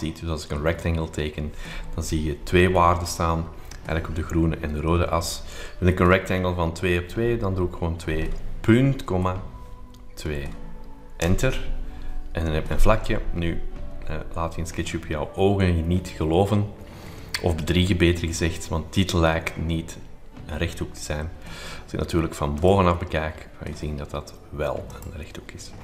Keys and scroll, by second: 8.0 2, 9.0 ;, 10.2 2, 11.2 Return.